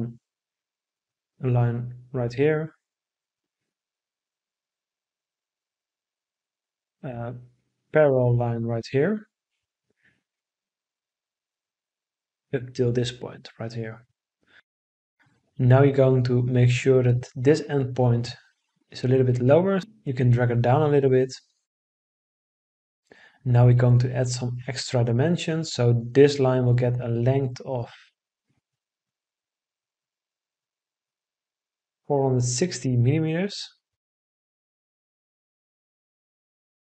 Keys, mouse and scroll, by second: 14.2 Escape, 32.9 4, 33.5 6, 34.0 0, 34.2 Return.